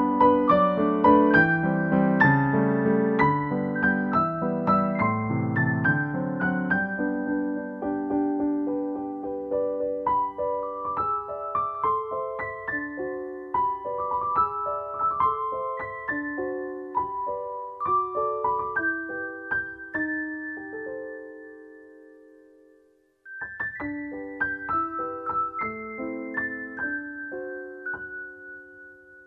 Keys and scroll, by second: 2.3 scroll down 1, 2.8-3.3 scroll up 1, 5.7 scroll up 1, 7.6 scroll down 1, 7.9 scroll up 1, 8.4 scroll down 1, 8.7-9.2 scroll up 1, 10.9-11.3 scroll down 1, 11.4-12.1 scroll up 1, 12.9-13.3 scroll up 1, 13.6-13.9 scroll up 1, 15.8 scroll down 1, 16.3 scroll up 1, 16.8 scroll down 1, 17.1 scroll up 1, 18.1-18.7 scroll down 1, 18.8-19.4 scroll up 1, 20.4 scroll down 1, 21.3 scroll up 1, 22.2 scroll up 1, 22.3-22.8 scroll down 1.